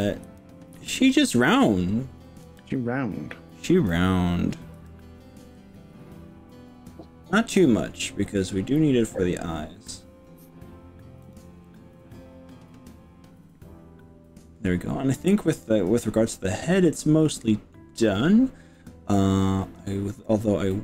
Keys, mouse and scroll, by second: 0.2 KP_8, 0.9 KP_7, 2.5 KP_3, 4.8 g, 11.3 click, 11.6-16.5 middle drag, 16.5 click, 20.7 middle click.